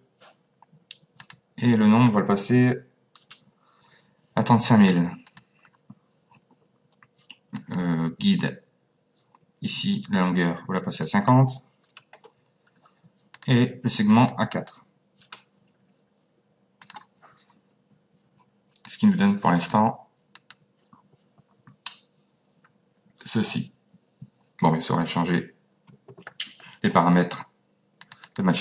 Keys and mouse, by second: 1.2 click, 3.2 KP_3, 5.3 click, 7.5 click, 10.8 click, 12.1 KP_0, 13.3 click, 16.8 click, 18.9 click, 20.3 click, 28.0 click.